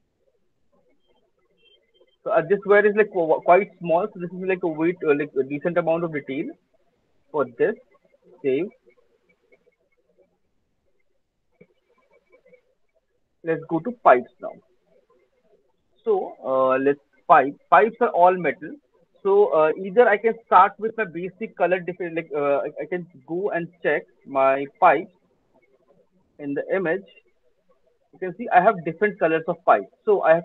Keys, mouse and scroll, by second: 0.0 alt+middle click, 0.4 alt+click, 0.7 alt+right click, 1.2 alt+middle click, 2.2 alt+click, 2.6 alt+middle click, 3.1 alt+click, 7.2 alt+click, 7.2 alt+right click, 7.6 alt+right click, 7.8 alt+middle click, 8.2 ctrl+s, 13.4 click, 14.7 alt+right click, 15.0 alt+middle click, 15.4 alt+click, 18.1 click, 24.4 click, 24.7 click, 25.4 right click, 25.8 middle click, 26.8 click, 27.6 click, 27.8 middle click, 28.0 middle click, 28.2 middle click, 29.3 middle click, 29.5 middle click, 29.9 middle click.